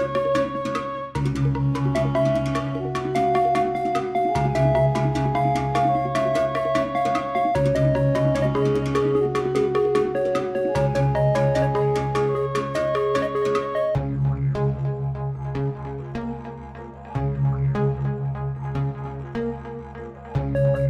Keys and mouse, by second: 9.6-11.4 drag, 12.4 x, 13.8 click, 18.0-18.8 shift+drag.